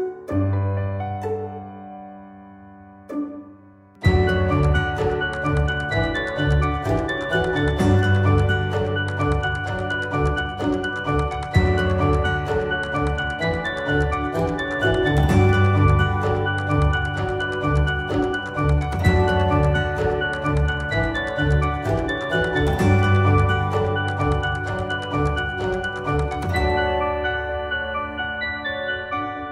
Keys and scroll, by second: 0.1 ctrl+z, 3.7 ctrl+z, 17.4 d, 22.4 shift+Page_Up, 23.3 F4.